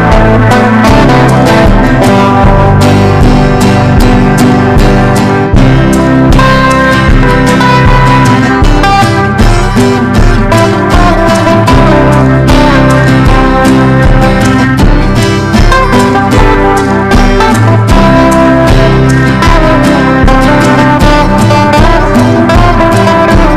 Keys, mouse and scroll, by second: 2.3-4.8 typing, 5.8 click, 6.6 ctrl+e, 7.9 ctrl+b, 9.1-17.0 drag, 17.9-20.1 typing, 20.6 click.